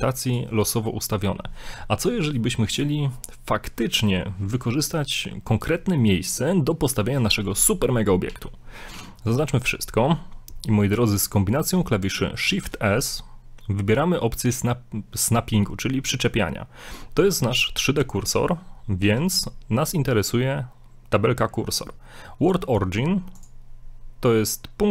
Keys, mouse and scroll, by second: 0.3 right click, 0.9 right click, 0.9 middle click, 8.3 a, 9.0 a, 9.4 x, 12.5 shift+s, 19.0 shift+s.